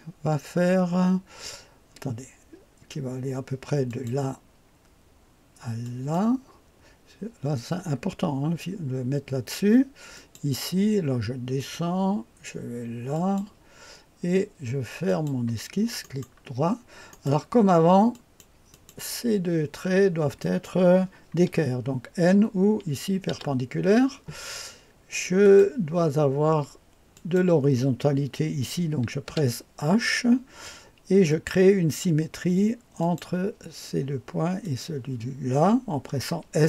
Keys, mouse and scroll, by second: 3.9 click, 5.8 click, 10.1 click, 11.6 click, 13.1 click, 15.1 click, 17.1 right click, 18.1 click, 18.7 click, 20.4 click, 23.3 n, 25.4 click, 27.1 click, 29.0-29.8 typing, 31.2 click, 33.0 click, 34.6 click.